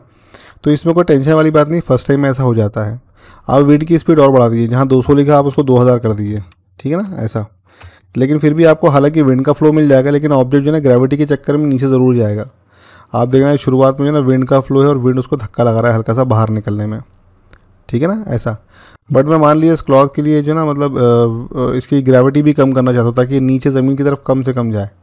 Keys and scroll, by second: 5.8 typing, 7.6 Return.